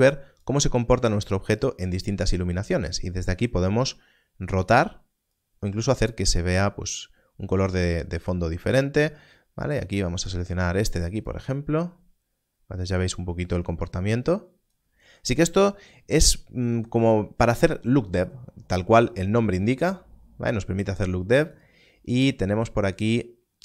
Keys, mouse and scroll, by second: 21.4 click.